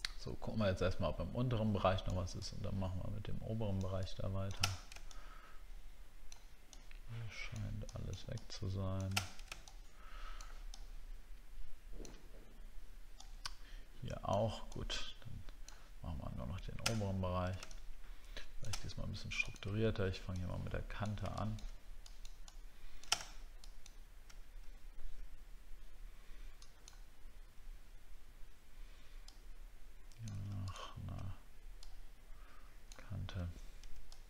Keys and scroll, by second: 4.7 alt+scroll down 1, 9.4-9.8 alt+scroll down 10, 17.0 alt+scroll up 2, 18.8 alt+scroll up 5.